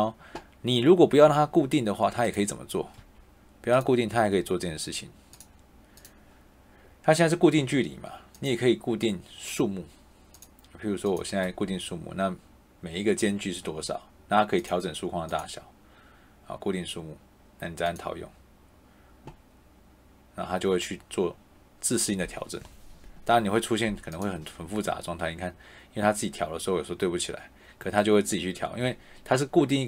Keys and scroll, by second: 2.9 Escape.